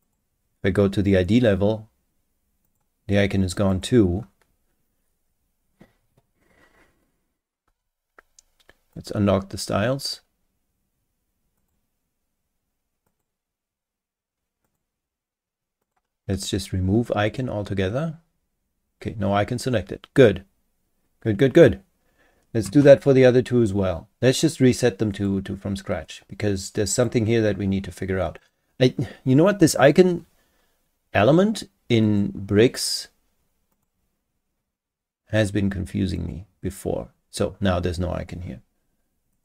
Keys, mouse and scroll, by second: 0.0 click, 2.6 click, 3.7 click, 8.9 click, 11.6 click, 13.1 click, 14.6 click, 15.8 click, 17.3 click, 25.1 click, 26.9 click, 28.4 click, 32.0 click, 33.7 click, 36.2 click, 39.3 click.